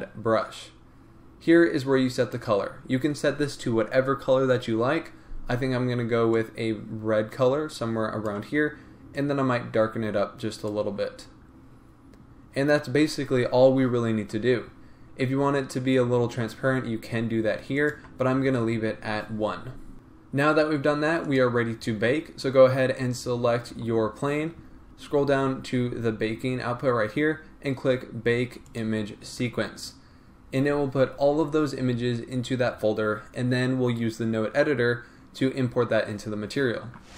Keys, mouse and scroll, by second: 16.1-21.3 drag.